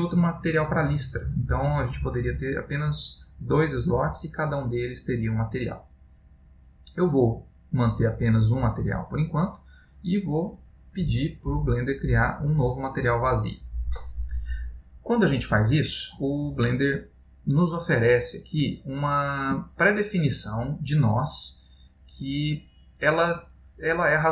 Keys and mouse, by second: 2.1 click, 12.1 click, 15.1 middle click, 18.9 middle click, 20.1 middle click, 22.1 click.